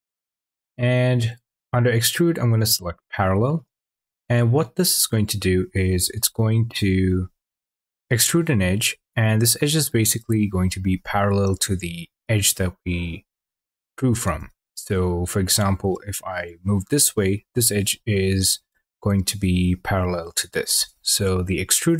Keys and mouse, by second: 5.1 click, 14.2 ctrl+z, 15.4 click, 20.7 ctrl+z, 21.3 click.